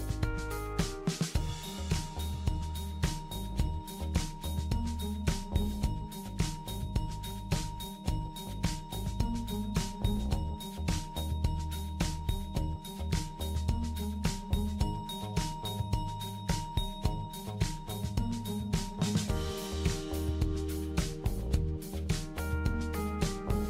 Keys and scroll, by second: 0.1 typing, 15.9-16.5 typing.